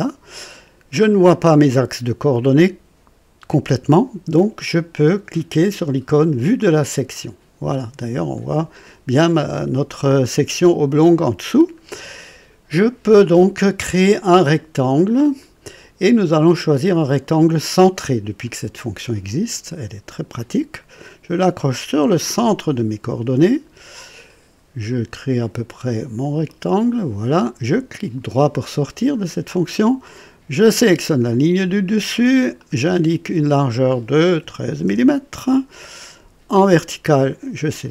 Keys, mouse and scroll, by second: 2.5 right click, 6.7 click, 7.8 scroll up 2, 8.3 right click, 10.7 scroll up 2, 11.2 right click, 15.3 click, 18.4 click, 22.4 click, 26.4 click, 27.7 right click, 30.6 click, 32.5 click, 34.4 KP_1, 34.6 KP_3, 34.8 Return, 37.6 click.